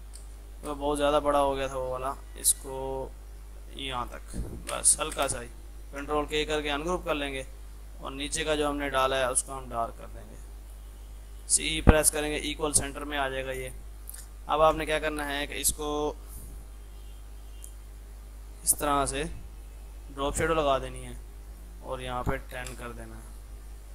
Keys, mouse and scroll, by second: 0.3 space, 1.1-4.6 drag, 4.6 F3, 5.2 space, 6.0 ctrl+k, 6.4 F3, 7.0 click, 8.9 z, 9.5 click, 11.5-12.3 typing, 14.1-14.8 typing, 16.3-21.5 drag.